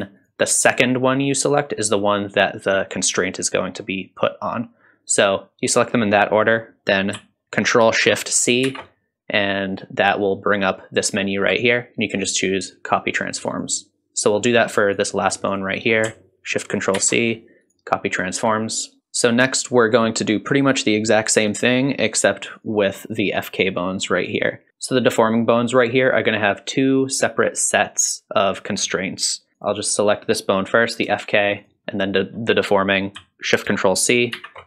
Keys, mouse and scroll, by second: 0.2 shift+click, 8.6 ctrl+shift+c, 15.0 click, 15.5 shift+click, 17.0 ctrl+shift+c, 22.6 click, 24.3 click, 29.6 click, 31.6 shift+click, 34.3 ctrl+shift+c.